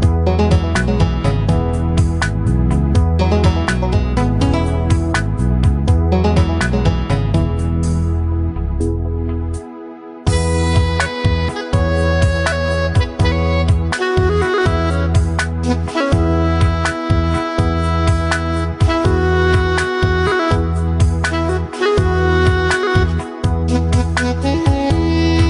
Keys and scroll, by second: 16.2 Delete.